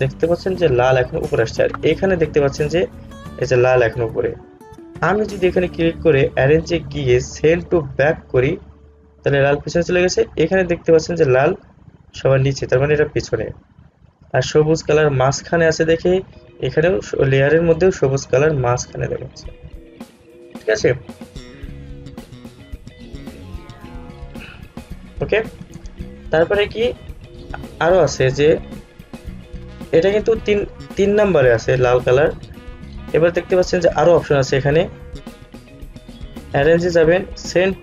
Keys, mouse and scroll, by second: 5.1 click, 5.8 right click, 7.0 click, 15.1 click, 23.3 click, 29.0 click, 32.8 click, 34.1 right click, 35.7 click.